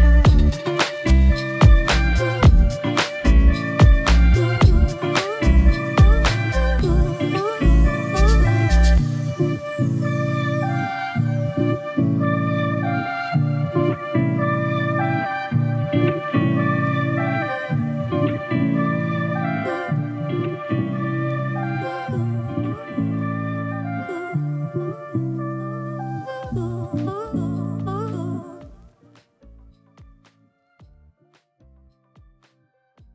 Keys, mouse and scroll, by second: 0.1-3.1 drag, 4.4 click, 5.5 click, 6.5-9.5 drag.